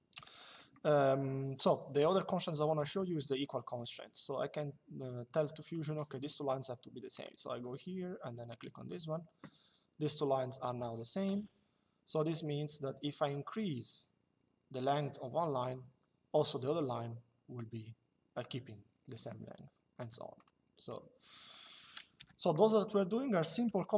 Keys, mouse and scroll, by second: 0.3 middle click, 5.4 click, 6.9 click, 8.2 click, 11.0 Escape, 11.9 click, 20.1 click, 21.9 Delete.